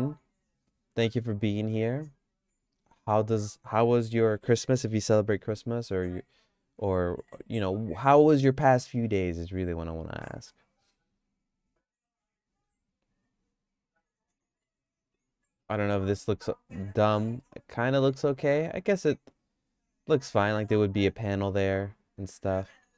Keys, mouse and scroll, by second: 0.2-1.6 drag, 2.6 q, 5.8 g, 7.2 s, 14.6 Tab, 15.1 Tab, 15.5 Tab, 15.7 Tab, 17.1 middle click, 17.4-22.9 shift+middle drag.